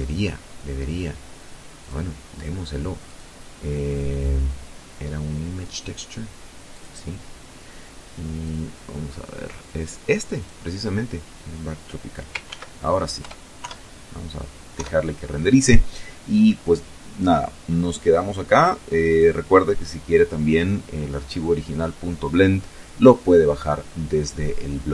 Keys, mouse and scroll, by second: 0.4 click, 1.7 click, 5.4 click, 7.1 click, 9.0 click, 11.1 ctrl+s, 11.8 Return, 12.2 F12, 13.4 F12.